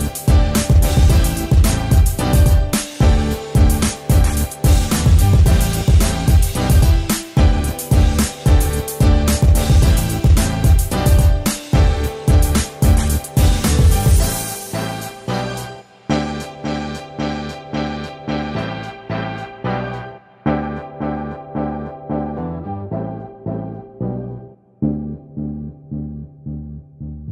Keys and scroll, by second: 15.0 ctrl+g.